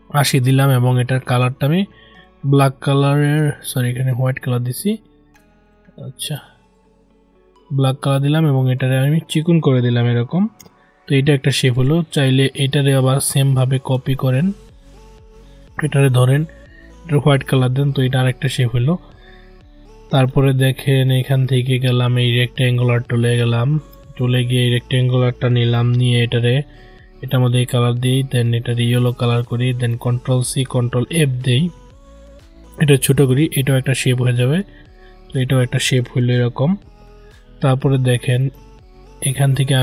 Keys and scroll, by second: 30.3 ctrl+c, 30.7 ctrl+f.